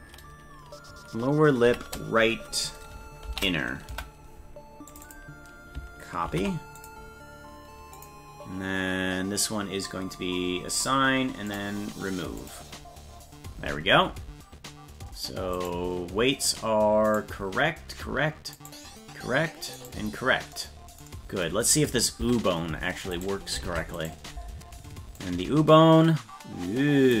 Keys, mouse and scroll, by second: 4.9 click, 5.0-8.0 drag, 10.8 click, 11.5 click, 12.4 click, 15.6 right click, 17.1 right click, 18.6 right click, 19.9 right click, 22.2 Tab, 23.1 right click, 23.7 ctrl+Tab, 24.0 right click, 25.2-27.2 drag.